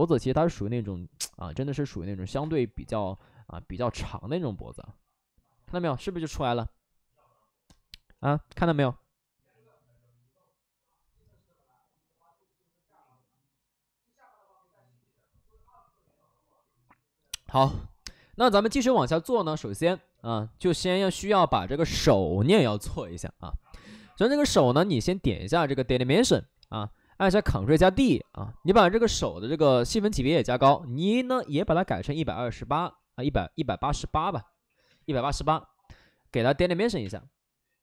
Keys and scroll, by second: 2.3 space, 3.1 alt+s, 3.8 3, 4.6 ctrl+z, 9.7 ctrl+z, 25.7 ctrl+z, 26.5 ctrl+d, 27.1 ctrl+d, 32.1-34.4 typing, 34.8 Return, 36.9 space.